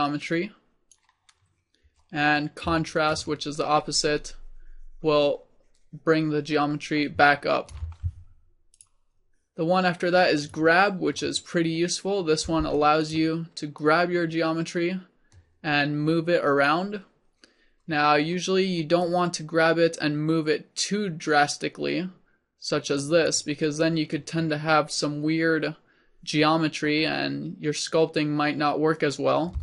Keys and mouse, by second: 3.2-5.9 drag, 8.8-15.7 drag, 12.5 f, 19.1-29.6 drag.